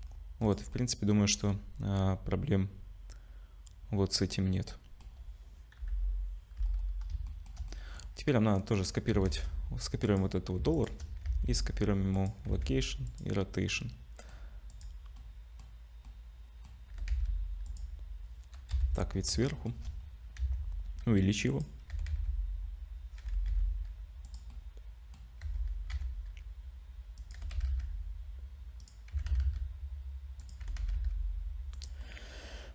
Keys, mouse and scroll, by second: 0.0-0.4 scroll down 4, 0.4 click, 0.7 middle click, 7.1 /, 7.3 shift+middle click, 7.7 middle click, 8.5 click, 9.6 shift+d, 10.7 shift+click, 11.2 ctrl+c, 12.5 ctrl+c, 13.7 middle click, 14.7 click, 15.2 middle click, 16.0 middle click, 16.9 g, 18.7 KP_7, 19.4 shift+middle click, 19.8-21.1 scroll up 3, 20.4 s, 21.9 r, 24.5 middle click, 25.4 r, 27.3 g, 29.1 s, 30.6 g, 32.0 middle click.